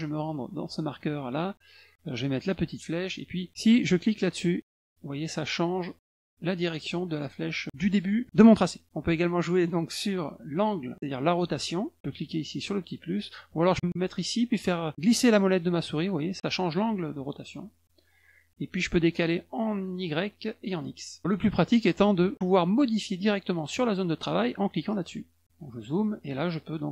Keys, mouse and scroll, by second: 0.3 click, 1.0 click, 2.3 click, 3.9 click, 4.4 click, 4.7 click, 5.0 click, 5.7 click, 6.5 click, 6.9 click, 11.5 click, 12.0 click, 12.1 click, 12.3 click, 12.4 click, 14.4-17.0 scroll up 9, 16.8 middle click, 17.5 middle click, 17.5 scroll up 1, 19.0-19.8 scroll up 3, 20.1 scroll down 1, 21.1 scroll up 1, 24.9 click, 25.4 middle click, 25.6 middle click, 26.0 middle click.